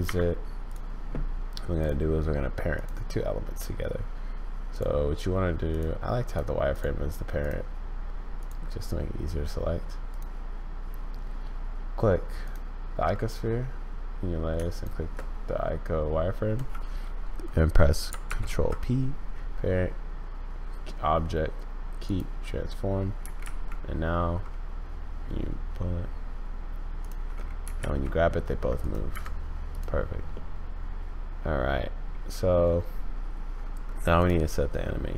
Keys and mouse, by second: 1.8 click, 5.7 click, 6.7 click, 7.4 click, 8.4 click, 10.1 click, 18.2 ctrl+p, 23.2 g, 27.6 g, 29.1 Escape, 30.4-32.3 drag, 32.3 middle click.